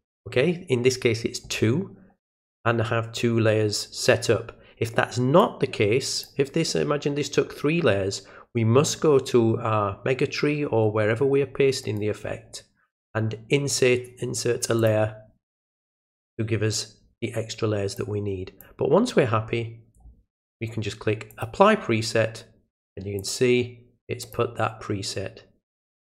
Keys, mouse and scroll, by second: 5.4 click, 11.8 right click, 14.8 click, 17.9 click, 21.3 click, 23.2 click, 24.2 click.